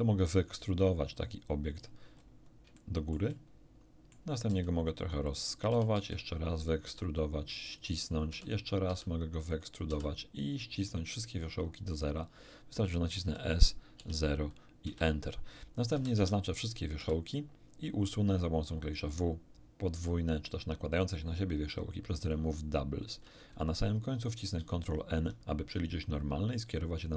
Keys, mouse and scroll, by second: 1.6 click, 2.1 scroll down 1, 2.7-4.2 shift+middle drag, 4.4 s, 5.2 click, 5.8 e, 5.9 z, 6.6 click, 6.8 s, 7.6 click, 8.2 e, 8.8 z, 9.4 click, 10.0 s, 12.0 click, 13.2 s, 13.9 0, 14.8 Return, 15.9 a, 16.1 a, 17.0 w, 22.2 click, 24.5 ctrl+n, 25.6-27.1 ctrl+middle drag.